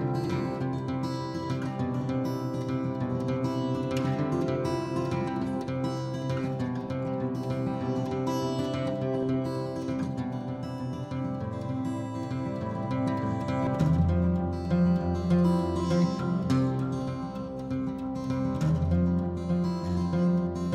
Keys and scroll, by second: 0.8 m, 3.3-4.6 typing, 3.9 Return, 6.0-8.1 typing, 9.2-11.3 typing, 14.7 h, 16.6 ctrl+h, 17.1-19.4 typing.